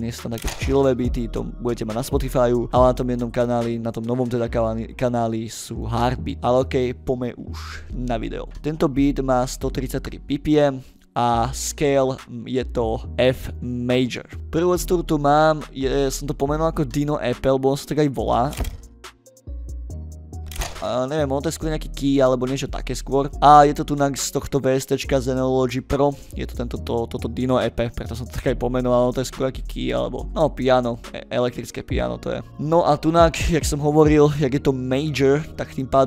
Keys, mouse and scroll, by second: 11.0 ctrl+scroll down 2, 11.6 scroll down 4, 12.0 scroll up 2, 12.9 click, 14.4 middle click, 14.4 scroll up 2, 14.9 middle click, 14.9 scroll down 2, 22.4 click, 23.1 click, 32.5 ctrl+middle click, 33.8-34.2 drag, 34.4 middle click.